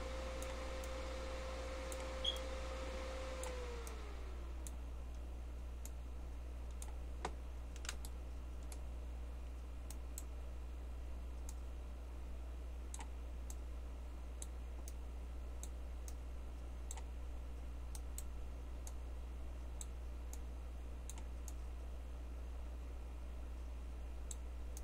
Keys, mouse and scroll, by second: 5.9-8.0 drag, 9.9-13.2 drag, 13.5-24.8 drag, 18.8-24.7 right drag.